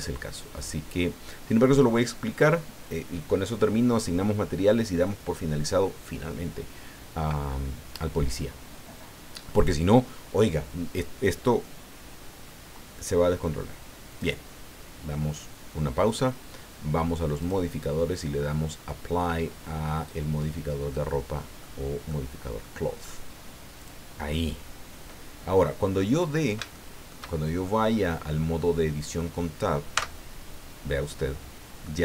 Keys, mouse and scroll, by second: 14.1 click, 17.4 click, 19.6-20.6 middle drag, 20.9-21.8 middle drag, 22.1-22.8 middle drag, 23.8 click, 24.3-25.3 middle drag, 25.6 middle click, 26.2 scroll up 2, 26.7-27.3 shift+middle drag, 27.3 shift+scroll down 2, 27.6-29.4 shift+middle drag, 30.0 Tab, 31.5-31.8 scroll down 2, 31.8-32.0 middle drag.